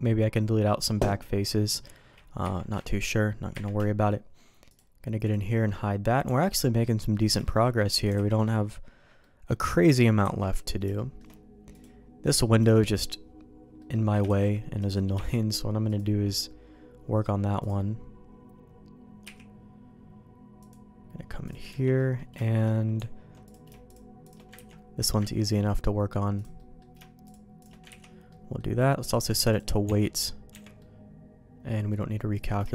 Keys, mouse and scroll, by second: 2.4 KP_Divide, 3.5 KP_Divide, 4.6 click, 5.2 click, 6.2 Tab, 6.6 middle click, 7.1 middle click, 7.4 shift+middle click, 8.1 alt+a, 8.2 middle click, 9.2 middle click, 10.2 ctrl+s, 10.5 middle click, 10.9 shift+middle click, 11.7 click, 12.2 middle click, 12.7 shift+middle click, 13.7 middle click, 14.2 shift+d, 15.1 m, 17.6 click, 19.2 h, 20.6 click, 21.4 click, 21.6 Tab, 21.9 middle click, 22.4 shift+middle click, 23.4 click, 23.8 shift+click, 24.5 ctrl+x, 25.0 click, 25.2 ctrl+x, 25.4 middle click, 26.3 click, 26.5 middle click, 27.2 click, 27.9 ctrl+x, 28.2 middle click, 29.0 click, 29.8 Tab, 30.5 Tab, 30.7-31.9 middle drag, 32.3 click.